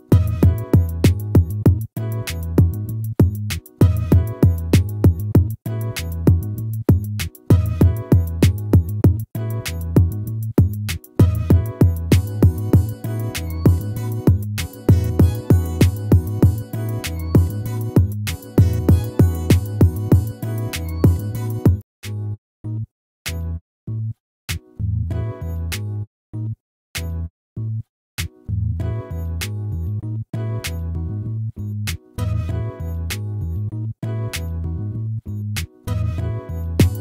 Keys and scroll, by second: 4.3 ctrl+-, 6.0 ctrl++, 21.8 ctrl+-, 34.6 ctrl+-.